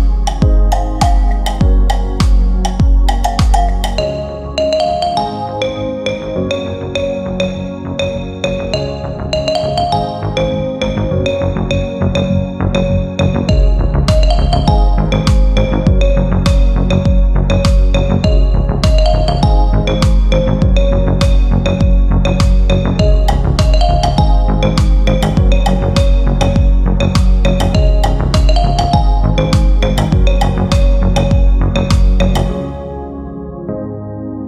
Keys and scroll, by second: 21.7 g, 31.5 F4, 31.8 Escape.